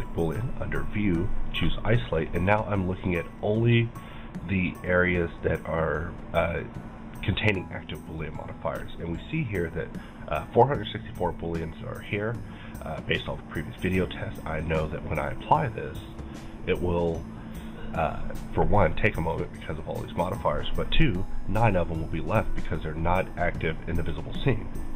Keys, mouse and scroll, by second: 0.4-11.6 drag, 2.2-21.0 middle drag, 14.7 right click.